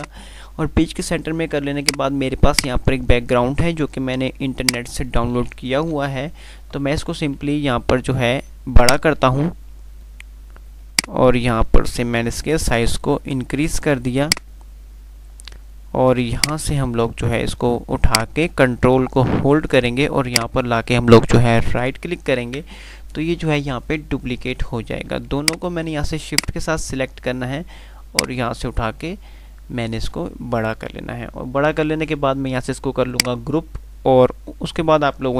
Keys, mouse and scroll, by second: 4.7 F2, 4.9 click, 5.2-5.6 F2, 6.1 Page_Up, 7.3 F3, 9.0-10.6 drag, 20.5 ctrl+right click, 25.6 click, 26.6 click, 28.4-31.4 drag.